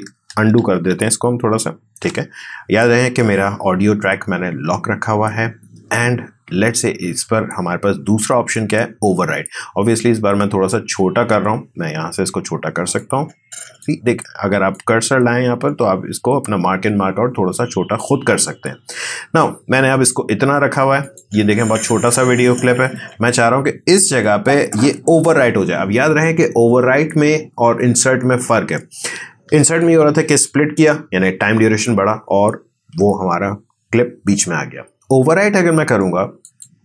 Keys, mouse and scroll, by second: 0.1 ctrl+z, 10.7 click, 11.0-25.9 drag, 36.4 click.